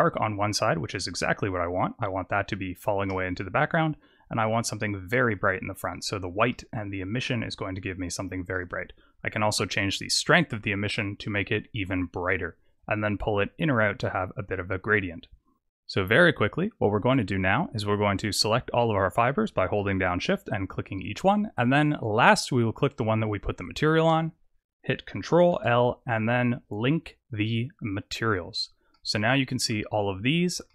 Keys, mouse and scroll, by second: 3.8 click, 6.4 shift+middle click, 8.3 click, 12.6 click, 14.8-15.6 scroll down 6, 15.6 click, 18.3 click, 20.1 shift+click, 21.3 shift+click, 23.7 shift+click, 25.4 ctrl+l, 28.3 click, 28.8 middle click, 30.1-30.6 scroll up 3, 30.6 shift+middle click.